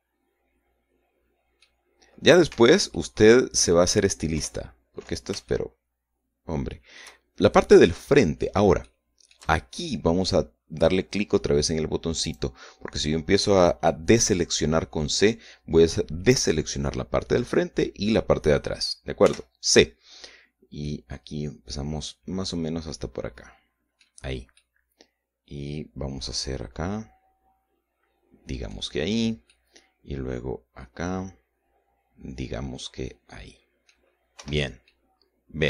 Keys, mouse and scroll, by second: 3.0 Escape, 3.4 middle click, 4.8 KP_1, 6.0-7.6 shift+middle drag, 7.8-8.2 shift+scroll up 1, 8.4 shift+middle click, 9.3 shift+middle click, 12.7 click, 19.7 c, 21.3-24.7 middle drag, 25.0-29.4 middle drag, 30.0-34.6 middle drag, 34.9 Escape, 35.0 scroll down 1, 35.4 middle click.